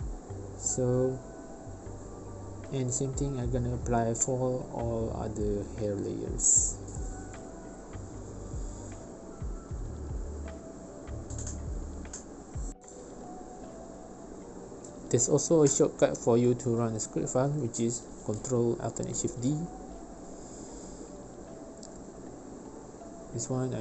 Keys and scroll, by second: 20.7 2.